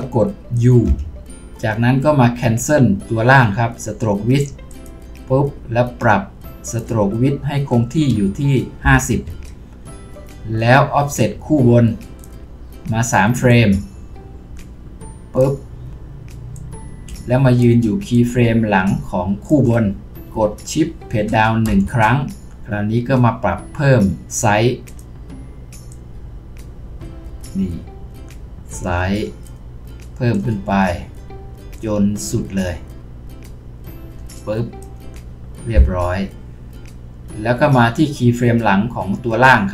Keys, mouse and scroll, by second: 0.9 typing, 8.1-8.8 typing, 9.3 Return, 21.7 shift+Page_Down.